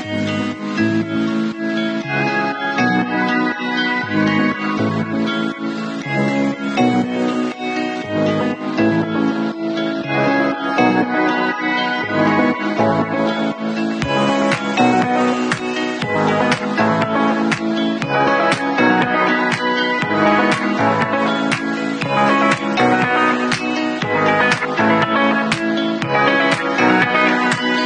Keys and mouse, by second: 2.7-10.5 drag, 10.5-15.5 middle drag, 11.6 ctrl+s, 15.5-17.2 alt+drag, 17.2-17.7 middle drag, 17.7-21.8 drag, 21.8-22.2 middle drag, 22.2-25.4 drag, 23.9 alt+d, 25.4 alt+middle click, 25.6-27.8 alt+drag.